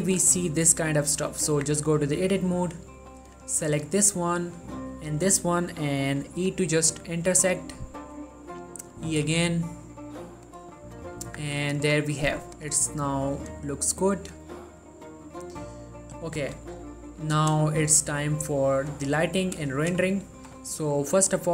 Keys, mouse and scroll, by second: 1.5 click, 1.7 Tab, 2.4 click, 4.4 middle click, 5.2 shift+click, 6.6 i, 8.3 click, 9.3 i, 10.5 click, 11.3 middle click, 11.4 Tab, 11.9-12.6 ctrl+middle drag, 12.6 click, 12.9 scroll up 1, 13.6 click, 15.8 middle click, 16.5 scroll down 1, 17.0 ctrl+middle click, 17.9 shift+middle click, 19.0 click, 19.6 middle click, 19.9 shift+middle click, 20.7 ctrl+scroll down 1, 21.4-21.5 drag.